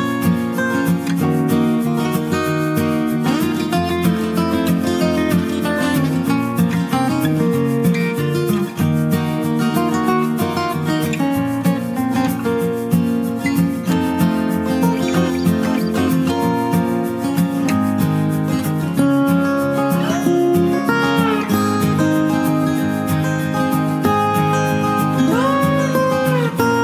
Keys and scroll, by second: 11.4 ctrl+space, 11.9 ctrl+space, 24.5 ctrl+space, 25.0 ctrl+space, 25.1 ctrl+space, 25.4 ctrl+space.